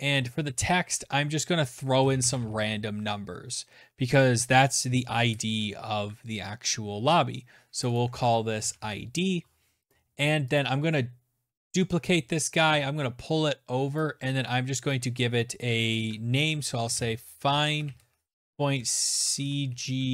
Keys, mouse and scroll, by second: 0.7-2.2 typing, 6.8 click, 6.9 click, 7.3-8.2 typing, 8.9 click, 9.2 click, 9.5 click, 10.6 ctrl+d, 12.9 shift+click, 13.9 click, 15.4-20.1 typing, 18.2 click.